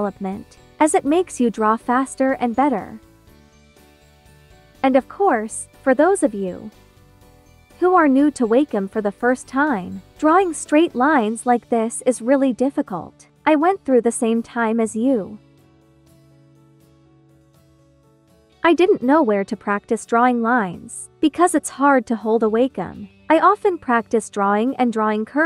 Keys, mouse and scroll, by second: 4.9 scroll up 1, 6.2-8.1 drag, 8.1 ctrl+t, 9.8-11.3 drag, 11.3 space, 11.5 click, 11.8 space, 12.8 click, 13.9 ctrl+d, 14.3 space, 14.3 click, 14.8 space, 15.5 b, 16.8 b, 18.7 alt+click.